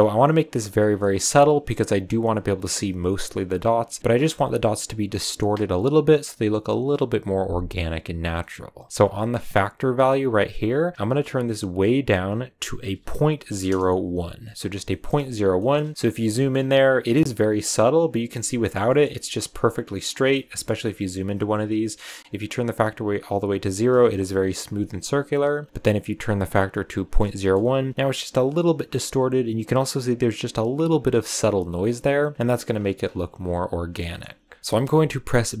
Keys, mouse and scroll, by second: 0.5 click, 0.8 scroll down 1, 0.9-1.5 middle drag, 1.5 click, 2.4 click, 8.3-10.1 middle drag, 10.1-13.0 drag, 14.8 shift+middle click, 15.1-16.3 scroll up 9, 15.5 shift+middle drag, 16.3 shift+middle click, 16.5-17.8 scroll down 2, 17.8 click, 18.8 shift+middle click, 19.5 click, 20.5 shift+middle click, 20.6-21.3 scroll up 4, 22.4-25.5 drag, 27.3-30.1 shift+middle drag, 32.6-33.9 scroll down 15, 33.9 middle click, 34.4 scroll down 1, 34.6-35.6 middle drag.